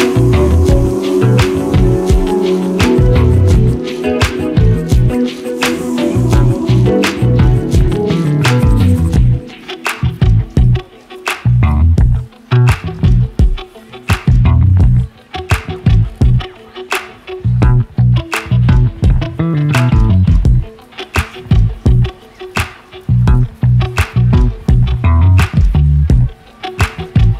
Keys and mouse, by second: 0.0-0.6 middle drag, 0.9 g, 3.6 click, 3.7-4.2 middle drag, 4.2 click, 4.5-6.3 middle drag, 8.5 shift+a, 10.4 ctrl+a, 14.1-14.7 middle drag, 15.0 middle click, 15.6 click, 17.6 g, 19.7-20.5 middle drag, 21.0 g, 25.0-25.4 middle drag, 25.9-26.4 middle drag, 26.8-27.2 middle drag.